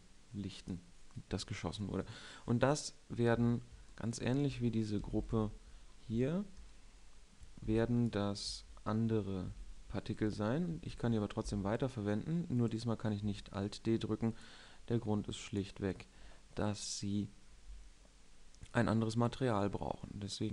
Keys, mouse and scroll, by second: 4.3 middle drag, 5.7 KP_7, 6.6 shift+scroll, 7.8 a, 8.0 b, 10.0 b, 11.2 shift+d, 14.8 drag, 15.4 r, 16.0-17.9 middle drag, 19.1-20.5 drag.